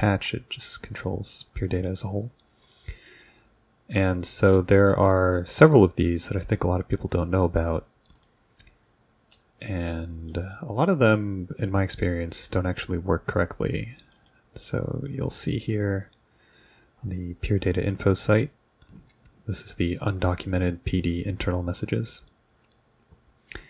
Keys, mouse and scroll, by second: 8.2 click, 9.3-14.2 middle drag, 14.2 click, 14.7-15.8 scroll down 2.